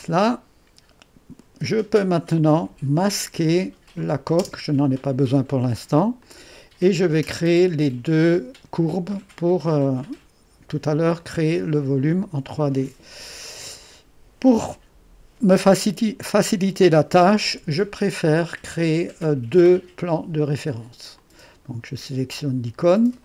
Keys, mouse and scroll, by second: 4.0 click, 4.5 space, 6.2-7.8 drag, 11.2-16.9 drag, 16.9 3, 21.2-23.2 drag.